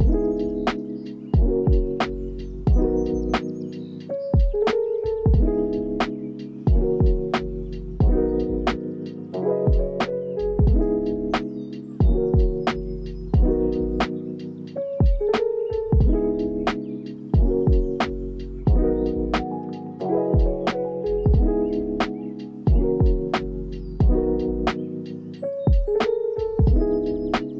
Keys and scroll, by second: 4.1 Down, 4.8 p, 8.8 ctrl+s, 11.0 x, 14.8 Up, 16.7 ctrl+s, 21.4 ctrl+s, 22.1 space, 25.4 space, 25.7 ctrl+s.